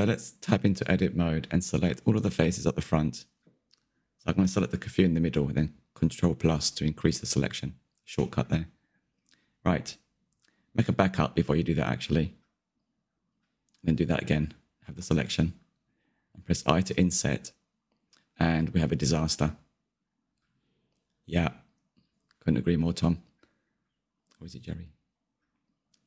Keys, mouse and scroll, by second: 0.1 click, 1.6 Tab, 3.2 3, 3.8 middle click, 4.4 click, 4.5 shift+click, 4.9 ctrl+KP_Add, 4.9 ctrl+KP_Add, 5.0 ctrl+KP_Add, 5.4 middle click, 5.6 scroll up 3, 5.8 shift+Left, 6.4 shift+click, 6.4 shift+click, 6.7 middle click, 7.1 click, 7.4 scroll down 1, 7.5 middle click, 8.0 shift+click, 8.4 shift+click, 8.5 shift+click, 8.6 middle click, 8.8 scroll down 1, 8.9 middle click, 9.4 ctrl+z, 10.1 Tab, 11.5 shift+d, 14.4 m, 15.1 click, 15.4 Tab, 18.0 i, 22.9 click, 23.7-25.1 middle drag, 25.1-26.0 drag.